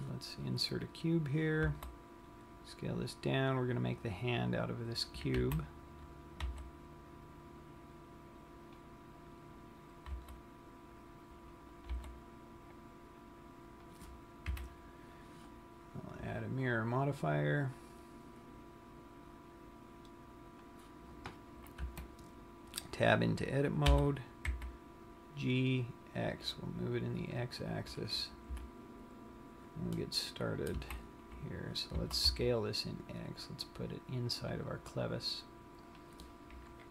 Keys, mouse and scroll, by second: 0.1 click, 0.9 scroll down 1, 2.1 s, 5.5 click, 6.0 z, 7.0 g, 9.1 click, 9.5-10.3 scroll up 5, 10.8 click, 10.8 s, 12.1 click, 12.1 g, 14.3 click, 14.8 KP_1, 17.1 click, 18.1 click, 22.1 Tab, 24.3 g, 27.8 click, 28.8 KP_3, 30.4 middle click, 31.0 z, 31.6-32.2 scroll up 5, 32.3 s, 36.2 click.